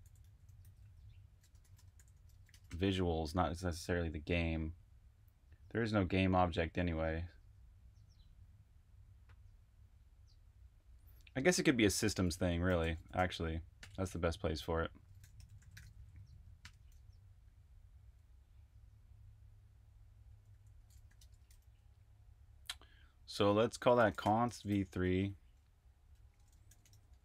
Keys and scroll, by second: 1.3-2.6 typing, 12.0-13.7 typing, 15.0-18.7 typing, 20.0-21.5 typing, 23.9-27.2 typing.